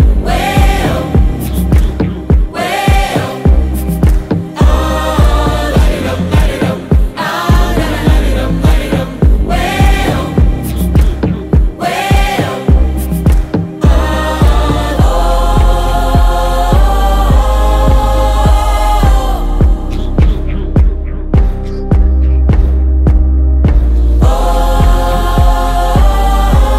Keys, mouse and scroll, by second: 1.2 ctrl+space, 1.6-3.1 typing, 3.6 click, 7.3 click, 23.6 click.